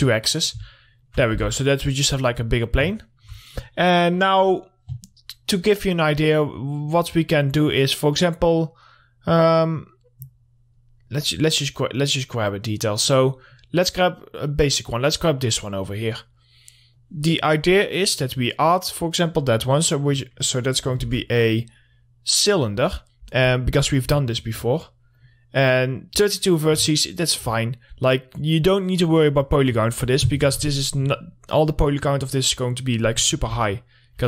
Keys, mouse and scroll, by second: 0.8 scroll down 1, 1.3 alt+middle click, 1.8 w, 2.6 middle click, 3.8 middle click, 4.3 click, 5.8 scroll up 1, 6.3-8.9 drag, 8.9 scroll up 1, 12.2 click, 14.2 scroll up 1, 17.3 click, 18.4 middle click, 18.9-19.2 scroll up 1, 19.2 click, 21.5 shift+a, 22.7 click, 23.3 scroll up 1, 24.0 middle click, 24.3 scroll up 1, 24.8 alt+middle click, 25.6 click, 26.8 middle click, 27.2 scroll down 1, 27.5 alt+middle click, 28.3 scroll up 1.